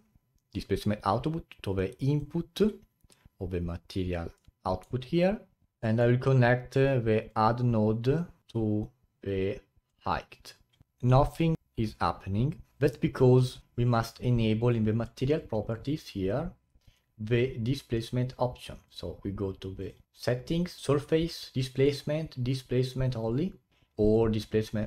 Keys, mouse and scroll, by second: 5.6-7.2 middle drag, 7.2-9.8 drag, 10.8 a, 13.6 click, 14.5 click, 15.2-16.3 scroll down 19, 18.8-20.1 drag, 20.1 scroll down 7, 23.2-24.0 drag, 24.0-24.8 drag.